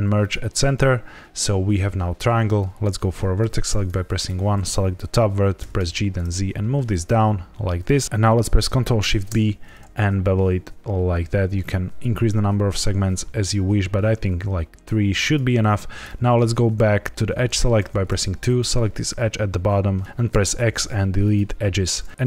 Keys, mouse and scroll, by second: 3.3 1, 3.8 click, 5.5 g, 5.7 z, 8.0 click, 8.0 ctrl+shift+b, 8.0 Escape, 9.0 ctrl+shift+b, 11.2 scroll up 1, 13.1-14.3 scroll down 1, 15.2 click, 17.7 2, 18.4 click, 19.9 right click, 20.2 x.